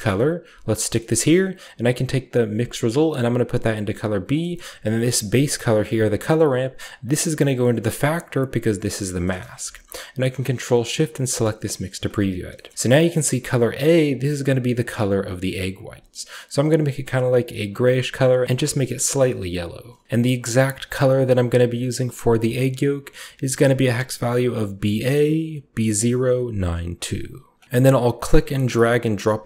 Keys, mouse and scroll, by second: 0.5 click, 0.9-2.2 scroll up 1, 2.8-4.1 drag, 4.9 click, 5.6 drag, 6.8-8.1 drag, 8.5 click, 9.1 click, 9.3-11.2 scroll up 3, 9.3 typing, 11.2 ctrl+shift+click, 11.9-12.4 shift+scroll down 2, 12.6 shift+middle click, 14.0-15.6 middle drag, 15.8-17.5 scroll up 2, 16.3 click, 17.0-18.2 drag, 20.0-21.8 middle drag, 20.0 ctrl+v, 22.0-27.5 drag, 27.5 scroll down 1, 27.6 middle click, 27.9-29.3 drag.